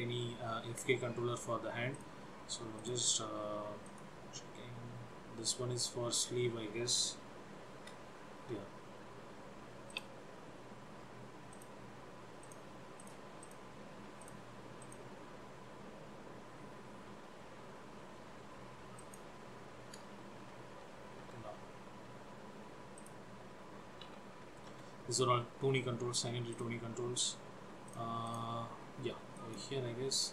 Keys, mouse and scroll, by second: 2.1 click, 3.0 click, 4.0 click, 6.2 click, 7.7 g, 10.1 click, 11.7 click, 12.6 click, 13.2 click, 13.5 click, 14.4 click, 14.9 click, 17.9 click, 19.1 click, 20.6 g, 23.0 click, 24.3 g, 26.7 click, 28.0 click, 28.5 click, 29.5 click.